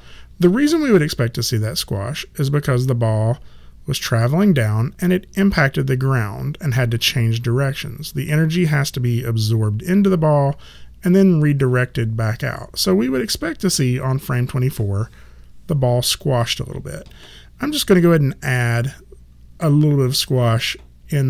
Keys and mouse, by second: 16.1 click.